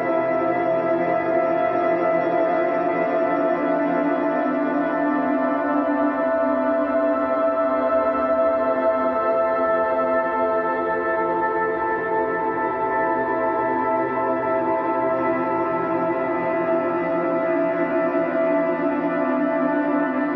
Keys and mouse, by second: 0.4 ctrl+z, 1.6 ctrl+z, 6.4 ctrl+z, 6.9 ctrl+z, 7.9 ctrl+z, 8.6 ctrl+z, 13.2 ctrl+z, 13.6 ctrl+z, 14.1 ctrl+z, 14.3 ctrl+z, 17.7 ctrl+z, 18.3 ctrl+z, 19.7 ctrl+z.